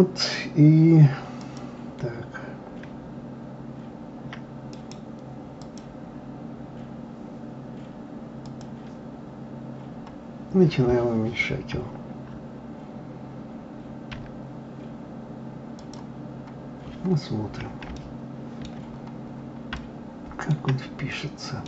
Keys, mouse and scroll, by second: 4.7-7.7 right drag, 8.5 click, 9.4-9.9 scroll down 2, 9.9-11.2 scroll up 1, 16.3 scroll up 3, 16.9-17.8 scroll down 1, 17.9-18.9 shift+middle drag, 18.9-19.7 scroll up 6, 19.7-21.6 shift+middle drag.